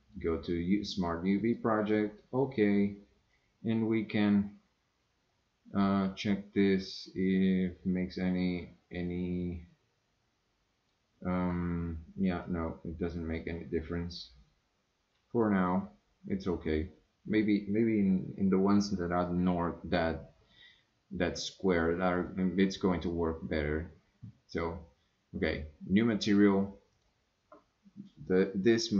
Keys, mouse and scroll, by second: 3.4-10.9 drag, 12.5-15.4 drag, 22.2 click, 25.5 click, 26.9-28.9 drag.